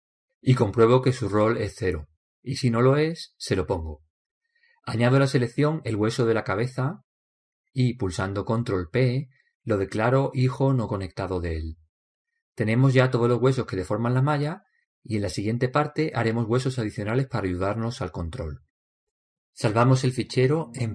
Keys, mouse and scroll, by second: 7.5-9.5 right drag, 9.3 ctrl+p, 13.4-19.1 middle drag, 19.1 click.